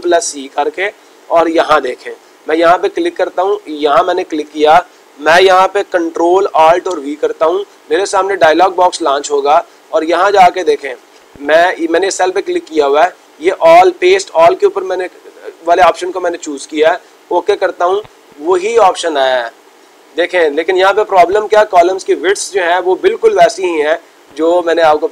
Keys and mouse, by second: 2.2-3.2 drag, 3.8-4.8 drag, 11.8-12.9 drag, 16.8 click.